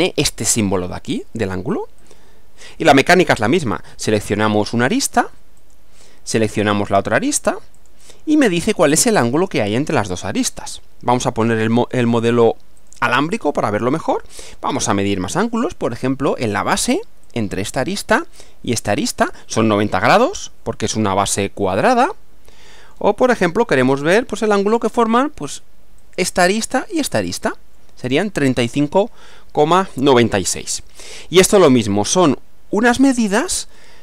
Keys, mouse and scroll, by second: 2.0 click, 5.6 click, 7.8 click, 11.8 click, 12.8 click, 14.0-15.5 middle drag, 17.2 click, 18.8 click, 21.9-23.1 middle drag, 23.2-24.6 middle drag, 26.0 click, 27.1 click, 32.8 click, 33.8-34.0 middle drag.